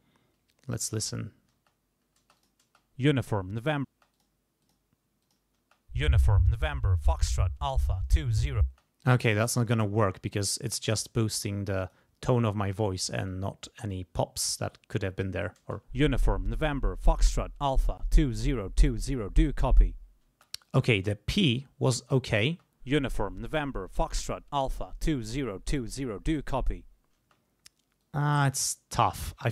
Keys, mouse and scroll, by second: 1.5 space, 2.2 space, 2.4 click, 3.9 space, 4.1 click, 4.6 click, 5.2 click, 5.6 space, 8.7 space, 9.0 click, 9.6 click, 11.0 click, 12.3 click, 13.3 click, 14.7 click, 15.6 space, 20.3 space, 20.7-22.4 scroll up 1, 22.4 scroll up 1, 22.5 space, 27.2 space, 28.0 click.